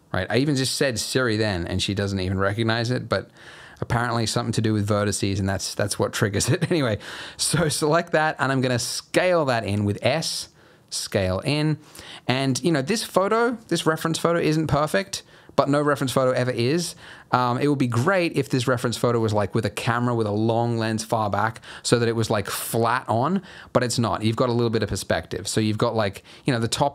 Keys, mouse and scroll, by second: 7.5 alt+click, 9.1 s, 13.0-14.8 scroll down 6, 14.8-15.2 scroll up 5, 15.2-16.3 scroll down 1, 17.3-17.9 scroll down 1, 18.0 scroll up 1, 18.3-20.3 scroll down 1, 21.7-23.7 scroll up 2, 23.7-24.7 scroll down 2, 24.7 scroll up 1.